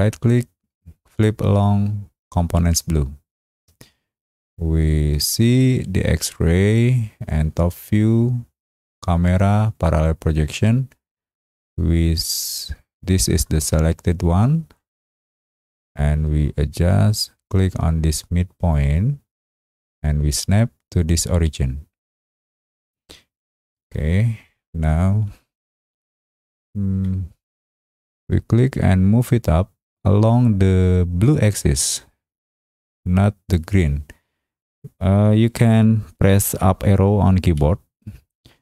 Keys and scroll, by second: 37.5 Up.